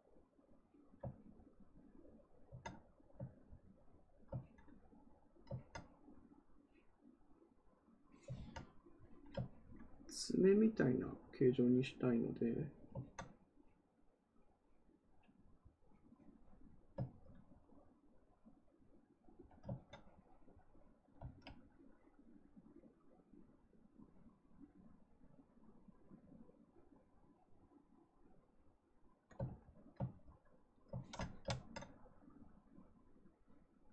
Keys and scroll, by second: 8.3 ctrl+z, 29.4 ctrl+z.